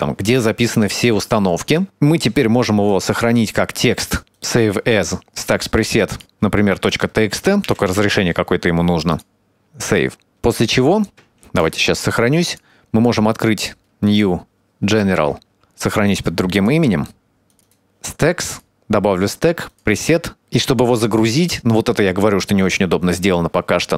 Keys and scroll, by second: 11.4 ctrl+s, 15.2 ctrl+shift+s.